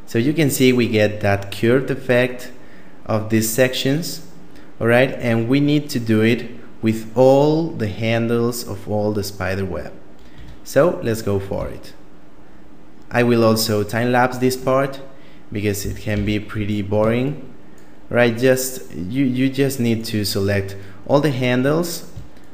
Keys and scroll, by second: 10.3 Tab, 11.5 a, 15.8 a, 16.1 a.